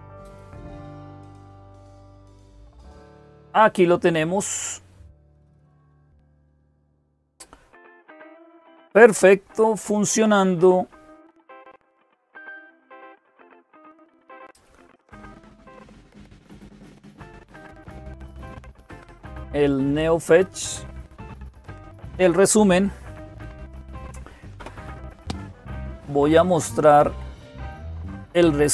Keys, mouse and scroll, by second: 6.6 click, 28.5 click.